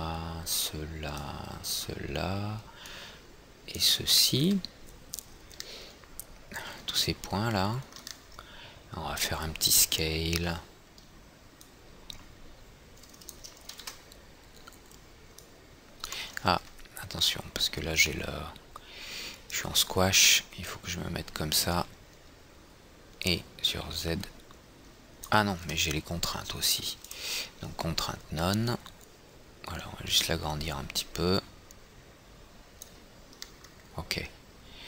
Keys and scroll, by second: 11.1 r, 14.3 ctrl+z, 26.1 ctrl+z.